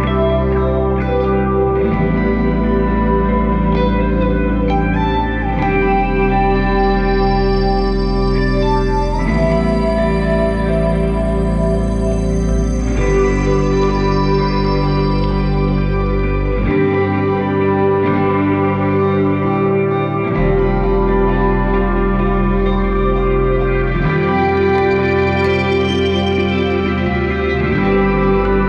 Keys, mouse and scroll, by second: 3.3 shift+a, 7.4-8.6 middle drag, 8.6 click, 9.9 middle click, 10.9-13.1 drag, 13.1 middle click, 13.8 scroll up 4, 14.7-17.7 drag, 18.4 click, 19.7 click, 21.6-22.4 scroll down 2, 22.4 click, 24.2-24.9 scroll down 2, 24.9-27.2 scroll down 6, 27.2-28.4 drag, 28.4-28.6 scroll down 2.